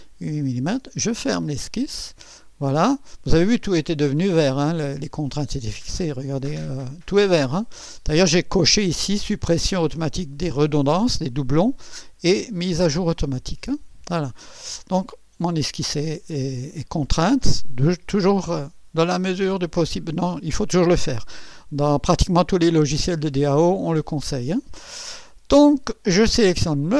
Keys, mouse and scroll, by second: 1.3 click, 5.6 click, 14.8 click, 15.8 click, 16.7 right click, 23.4 scroll up 2, 26.6 click.